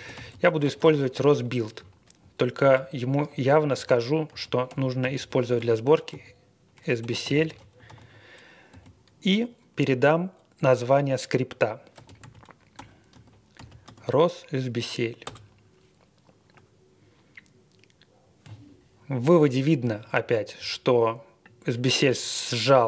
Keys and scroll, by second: 0.0-8.7 typing, 11.7-13.8 typing, 15.2 Return.